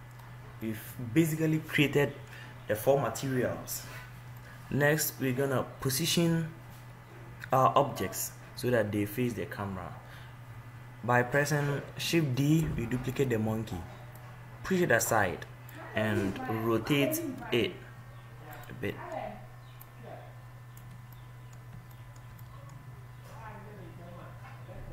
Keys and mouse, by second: 4.2 middle click, 12.8 shift+d, 14.5 click, 16.9 r, 19.2-20.8 drag, 21.4-23.2 middle drag.